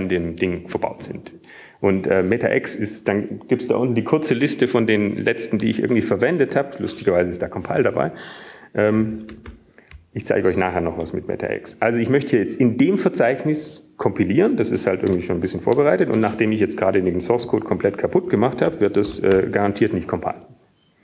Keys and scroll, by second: 11.9-12.7 typing, 13.7 typing, 18.9 Return.